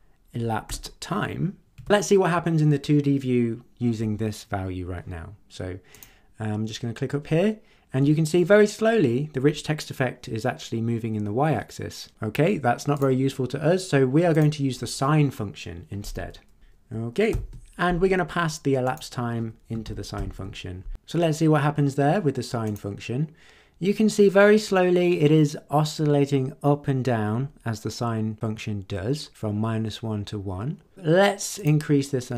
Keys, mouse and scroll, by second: 0.6 Return, 1.8 ctrl+s, 5.9 click, 12.9 click, 14.3 click, 16.6 shift+n, 17.3 shift+9, 18.8 click, 19.8 shift+0, 22.6 click, 31.5 click.